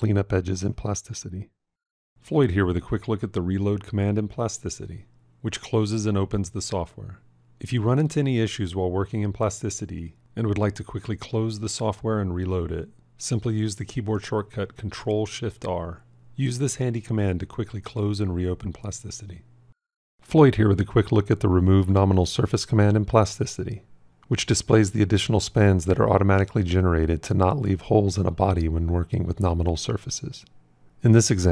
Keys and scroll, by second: 13.0 ctrl+shift+r.